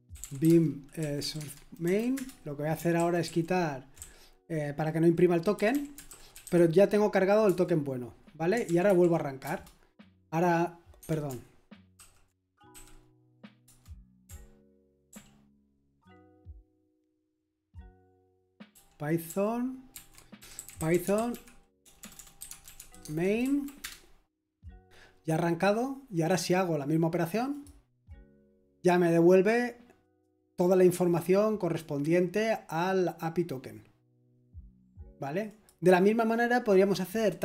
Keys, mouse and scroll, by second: 0.0-1.7 typing, 1.8 Right, 2.1 Return, 3.0 ctrl+d, 3.2 ctrl+d, 3.7-6.9 typing, 7.4 Return, 8.6 ctrl+p, 8.6 typing, 8.9 ctrl+p, 9.4 Return, 11.0 Escape, 11.7-13.6 typing, 15.1 ctrl+p, 17.1 ctrl+p, 18.1 ctrl+p, 18.1 typing, 18.7 ctrl+p, 19.9 ctrl+c, 20.1-23.2 typing, 23.4 Right, 23.8 Return, 26.1 click, 26.1 typing, 27.7 click, 27.7 typing, 35.5-36.6 drag.